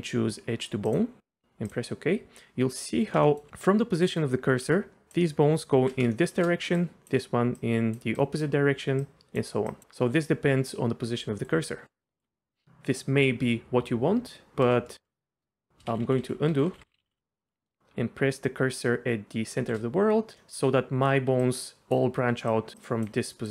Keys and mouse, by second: 3.2 shift+middle drag, 4.6-5.8 d, 4.9 click, 6.1 shift+middle click, 6.6-7.4 d, 6.7 click, 7.6 click, 7.6-9.8 d, 8.2 click, 9.0 click, 9.7 click, 11.1 d, 11.4 click, 12.2 d, 15.9 ctrl+z, 16.1 ctrl+z, 16.2 ctrl+z, 16.5 ctrl+z, 16.7-17.1 ctrl+z, 19.6 shift+c, 20.4 click, 21.3-23.5 typing, 21.4 click, 22.5 click, 22.8 click.